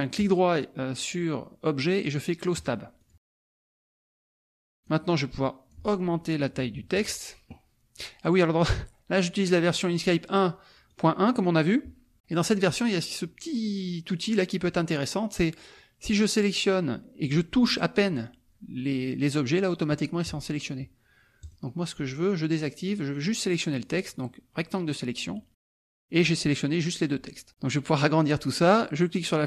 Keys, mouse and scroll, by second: 0.2 right click, 2.5 click, 3.1 click, 3.5 KP_Subtract, 4.8-6.2 drag, 8.3 click, 9.7 click, 10.9 click, 16.2-17.9 drag, 21.4 click, 23.0 click, 24.1-25.1 drag.